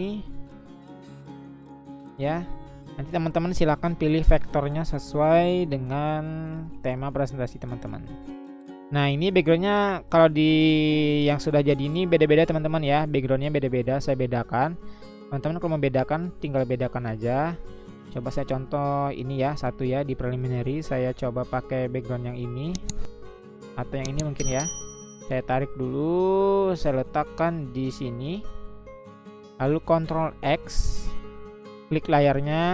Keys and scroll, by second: 4.1 ctrl+c, 7.7 ctrl+v, 30.5 ctrl+x.